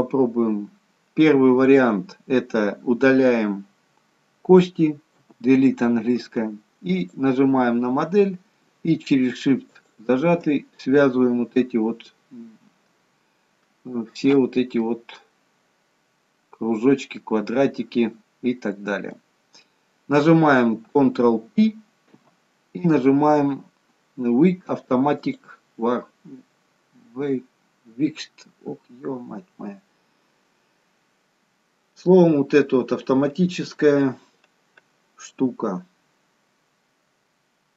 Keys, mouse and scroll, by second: 5.3 Delete, 7.0 click, 9.6 shift+click, 14.9 middle click, 22.2 ctrl+p.